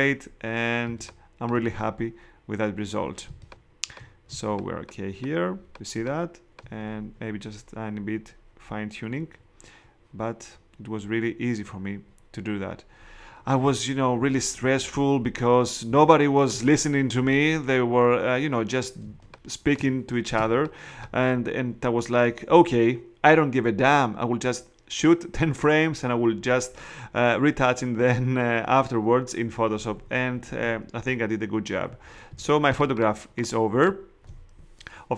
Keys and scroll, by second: 0.8 space, 3.2 space, 15.9 space, 19.0 space, 20.3 space, 32.3 space.